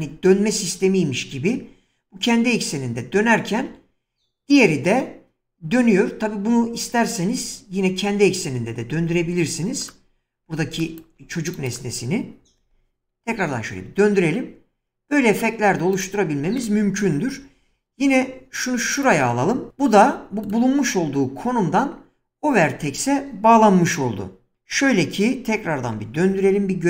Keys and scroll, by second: 10.4 <, 12.7 r, 13.2 z, 17.6 shift+d, 19.7 typing, 25.9-26.3 typing.